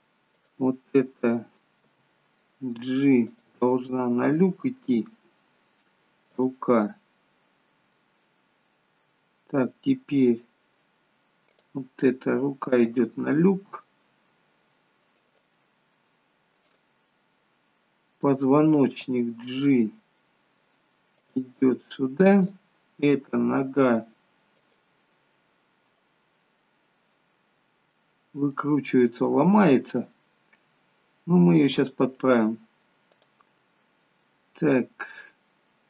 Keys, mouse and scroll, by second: 0.4 click, 1.8 g, 3.9 middle click, 6.4 middle click, 6.4 click, 6.9 middle click, 11.6 click, 12.8 g, 16.5 click, 17.1 middle click, 19.0 g, 22.4 click, 23.1 g, 25.1 middle click, 26.6 middle click, 28.2-28.6 scroll down 3, 28.6 middle click, 30.3-31.1 scroll up 4, 30.7 middle click, 33.2 middle click, 33.2 click, 33.7 middle click.